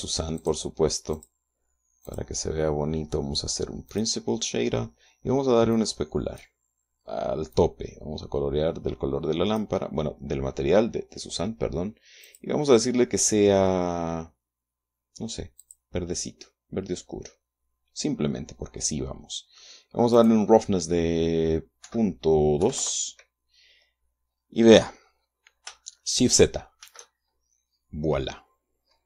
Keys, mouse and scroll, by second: 0.8 click, 1.6 click, 2.5 click, 4.3 click, 6.2 click, 8.0-10.2 drag, 12.7 click, 16.0 click, 16.6-17.4 scroll down 1, 20.6 click, 22.3 KP_Decimal, 23.0 KP_2, 23.2 KP_Enter, 25.5-25.8 scroll up 2, 27.2 shift+z.